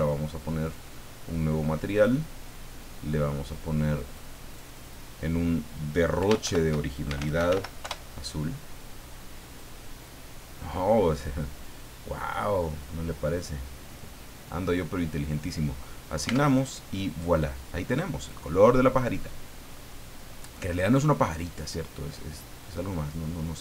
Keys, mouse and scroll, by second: 0.6 click, 1.9 click, 3.9 click, 4.5 click, 6.2 Home, 6.4 shift+End, 6.8-8.0 typing, 9.5 click, 11.1 click, 13.3 click, 15.3 click, 16.3 Tab, 16.7-17.0 scroll down 1, 17.2-18.4 middle drag, 18.5 middle click, 19.7 middle click, 21.1-23.6 drag.